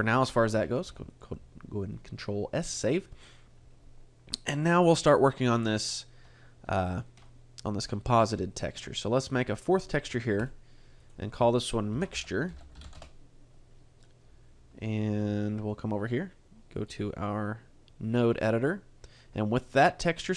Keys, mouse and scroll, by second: 0.9 ctrl+s, 6.8 shift+middle click, 7.2 middle click, 8.0-9.7 scroll up 1, 9.7 shift+middle click, 9.7 click, 9.7-11.0 scroll up 1, 11.0 click, 16.7 click.